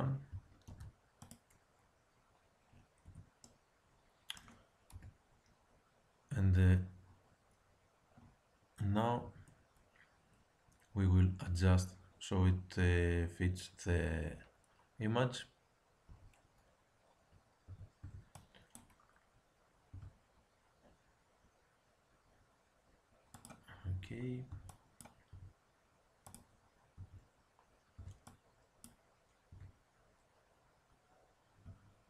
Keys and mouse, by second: 0.6 alt+m, 3.0 Tab, 4.8 KP_1, 9.2 Tab, 16.0 z, 17.7 a, 18.0 b, 19.9 g, 23.9 a, 24.5 b, 25.3 g, 26.9 a, 27.9 b, 29.5 g.